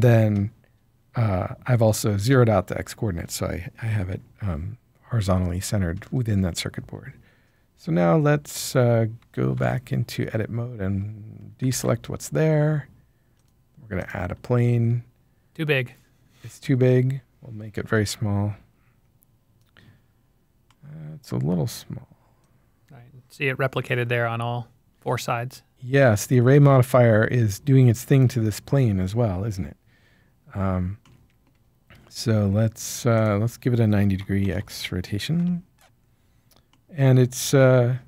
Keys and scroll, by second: 9.5 Tab, 11.7 alt+a, 34.4 typing, 35.3 Return.